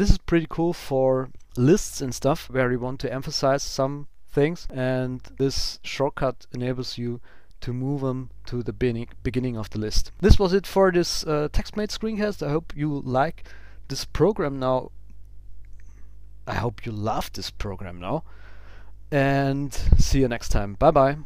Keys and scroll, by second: 1.0 ctrl+super+Up, 10.1 super+s.